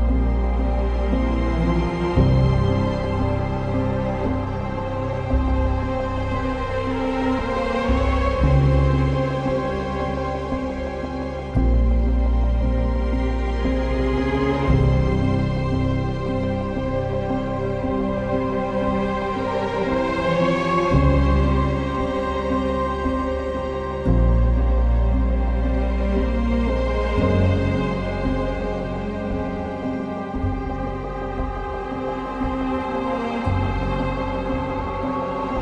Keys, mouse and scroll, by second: 2.8 ctrl+z, 5.8 ctrl+z, 7.1 ctrl+z, 9.5 ctrl+z, 10.1 ctrl+z, 12.6 ctrl+z, 14.1 ctrl+z, 18.9 ctrl+z, 22.4 ctrl+z, 24.6 ctrl+z, 25.8 ctrl+z, 26.5 ctrl+z, 33.3 ctrl+z, 34.9-35.2 typing.